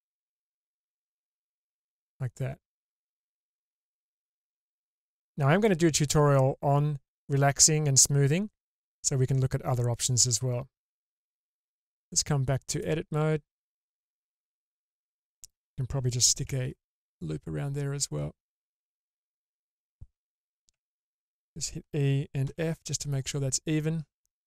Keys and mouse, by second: 1.6-5.6 middle drag, 12.1-12.8 drag, 13.5-15.1 middle drag, 16.4 ctrl+r.